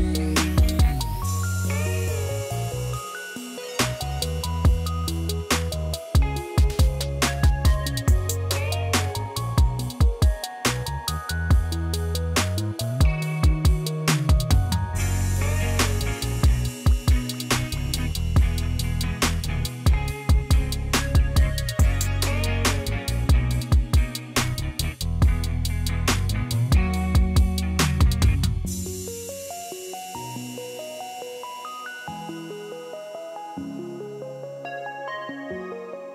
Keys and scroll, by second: 14.5 1, 29.6-30.5 typing.